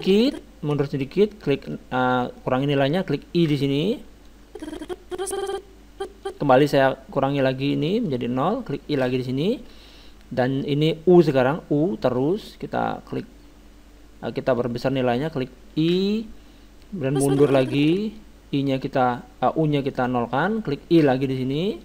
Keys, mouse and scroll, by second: 1.7-3.4 drag, 3.5 i, 4.3-6.0 drag, 7.2-9.0 drag, 9.0 i, 12.2-14.0 drag, 15.9 i, 17.1-20.6 drag, 21.0 i.